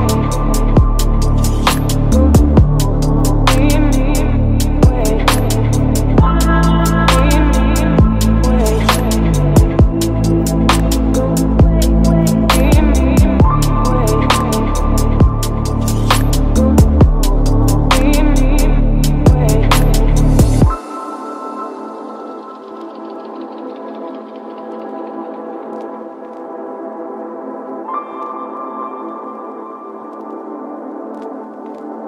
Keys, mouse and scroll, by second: 7.8 right click, 8.4-10.4 drag, 10.4-11.8 right drag, 11.8-14.2 drag, 14.2 F5, 18.5-20.7 drag, 20.7 middle click, 21.4 Return, 22.4 shift+3, 22.5 shift+3, 23.3 space, 26.3-28.0 middle drag, 28.0 q, 28.4 Return, 29.5 q, 29.6 t, 30.7-31.9 typing.